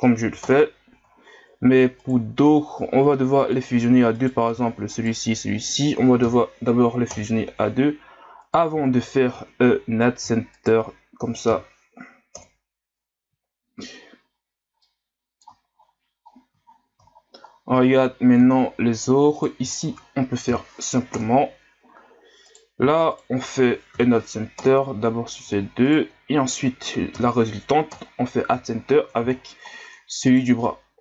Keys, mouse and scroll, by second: 1.3 ctrl+scroll down 2, 2.0 right click, 2.6 ctrl+scroll down 6, 3.1-4.1 middle drag, 4.1 right click, 5.0 shift+right click, 6.2 m, 8.4 right click, 10.6 shift+right click, 11.5 m, 14.3 scroll down 4, 14.8 middle click, 15.7-16.3 ctrl+scroll down 4, 16.3-16.6 scroll down 4, 16.6 ctrl+scroll up 1, 17.5 shift+scroll down 6, 17.8 scroll up 5, 18.5-19.4 ctrl+scroll up 8, 19.4 right click, 19.7 shift+right click, 20.5 m, 22.5 right click, 23.1 shift+right click, 23.9 m, 25.9 shift+right click, 27.2 m, 28.9-29.3 ctrl+scroll up 5, 29.3-29.8 shift+scroll down 11, 30.3 right click, 30.6-31.0 middle drag.